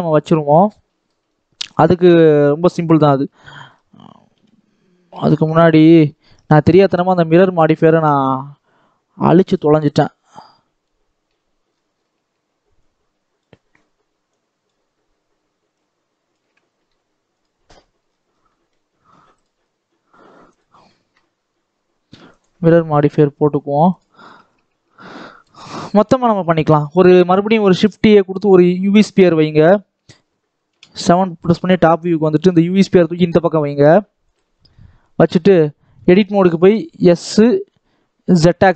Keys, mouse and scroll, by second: 0.7 middle click, 1.2-1.5 scroll up 1, 1.5 scroll down 1, 1.6-4.2 middle drag, 4.2 KP_1, 5.0 shift+middle click, 5.4 scroll up 2, 5.7 Tab, 6.0 shift+middle click, 6.6 scroll up 4, 7.8 click, 8.2-9.3 scroll down 3, 9.3 click, 10.2 click, 11.6-12.7 scroll up 6, 12.7-15.7 shift+drag, 16.7 x, 17.7-18.4 scroll down 11, 18.4 middle click, 19.3 click, 19.5-20.4 scroll down 4, 22.3-23.4 drag, 23.8 click, 24.1 scroll up 1, 24.4 Tab, 24.9 shift+middle click, 25.7-26.2 scroll up 1, 26.2 shift+a, 29.0 middle click, 29.5 KP_1, 31.4 shift+middle click, 31.9 scroll up 1, 32.3 g, 35.0 scroll up 1, 35.2-35.6 scroll down 1, 35.6 middle click, 35.9 Tab, 36.4 s, 38.6 middle click.